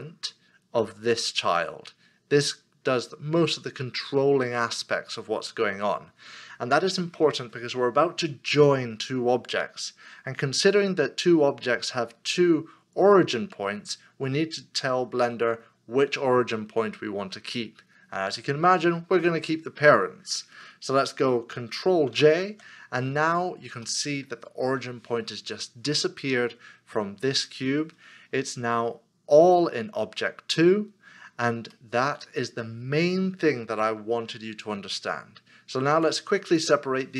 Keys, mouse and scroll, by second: 22.1 ctrl+j, 23.9 middle click, 31.7 middle click.